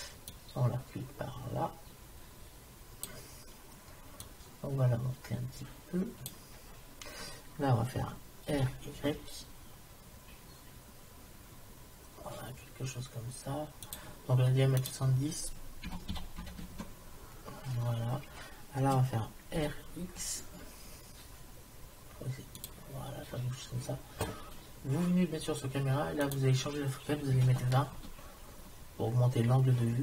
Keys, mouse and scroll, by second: 0.4 middle click, 1.4 click, 4.3 click, 5.9 click, 8.5 r, 14.8-16.7 drag, 19.6 r, 26.3-27.9 drag.